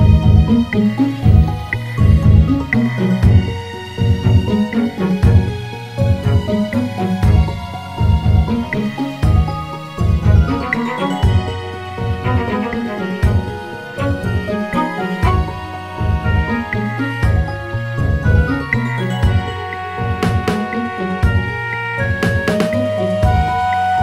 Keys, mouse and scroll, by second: 0.2 s, 3.6 Tab, 5.2 click, 7.0 e, 10.3 Tab, 11.8 click, 13.2 scroll down 1, 13.7 click, 15.9-17.6 scroll down 1, 18.4 shift+a, 23.6 s.